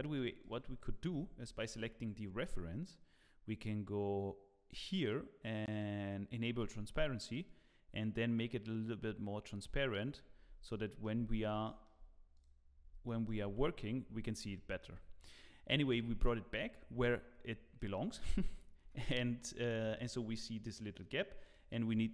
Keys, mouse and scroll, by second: 0.0 Tab, 0.4 click, 1.2 scroll down 4, 2.7 scroll down 2, 4.7 click, 6.6 click, 10.1 click, 10.3 scroll up 4, 10.7 shift+middle click, 11.2-11.5 scroll up 2, 11.6 shift+middle click, 12.3 click, 12.7 scroll up 2, 13.0 shift+middle click, 13.4 Tab, 14.5 shift+middle click.